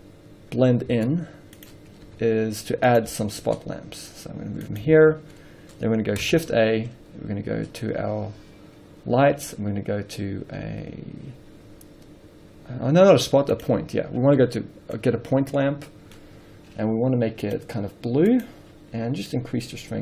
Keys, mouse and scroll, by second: 0.6 right click, 1.2 z, 2.7 s, 3.7 g, 5.2 alt+a, 7.9 shift+a, 14.9-18.6 middle drag, 15.5-15.8 scroll down 2, 16.5-17.5 scroll up 2, 17.5-18.6 scroll up 1, 18.6 click, 19.6-20.0 drag.